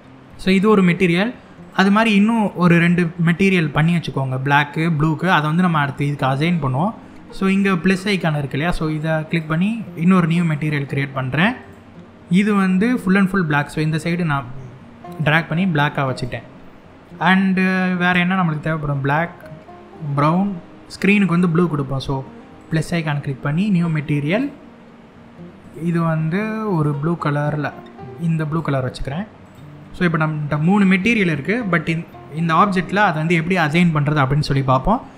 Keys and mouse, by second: 1.3 click, 5.0 middle click, 9.0 click, 10.3 click, 11.3 click, 15.8 click, 22.3 click, 24.0 click, 25.3 click, 26.5 drag, 31.0 middle click, 34.6 middle click.